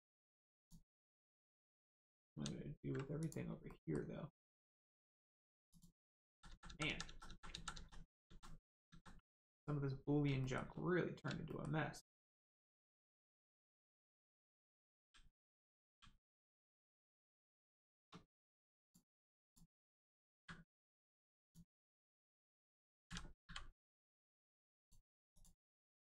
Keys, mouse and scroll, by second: 0.0 ctrl+middle click, 0.6 click, 1.0-1.6 scroll down 1, 1.6-2.1 scroll up 1, 2.2 ctrl+z, 3.2 click, 3.6 middle click, 4.4 scroll down 1, 5.0 middle click, 5.6 click, 6.2 ctrl+z, 6.4 ctrl+z, 6.6 ctrl+z, 6.8 ctrl+z, 7.0 ctrl+z, 7.2 ctrl+z, 10.4 shift+middle click, 10.7 scroll up 1, 11.4 shift+middle click, 15.8 g, 16.8 right click, 17.3 click, 17.8 shift+click, 18.8 click, 19.4 shift+click, 20.3 m, 21.4 click, 24.7 click.